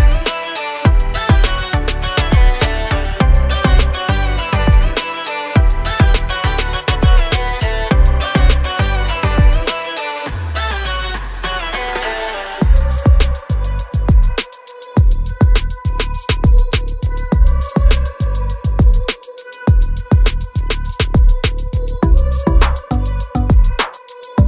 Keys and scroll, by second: 2.2 l, 3.2 space, 3.6 p, 5.1 space, 7.9 m, 8.5 Left, 9.8 space, 10.4 r, 11.7 space, 12.1 p, 15.2 space, 16.1 m, 17.4 space, 17.7 p, 19.6 space, 19.7 Escape, 21.4 r, 23.2 space.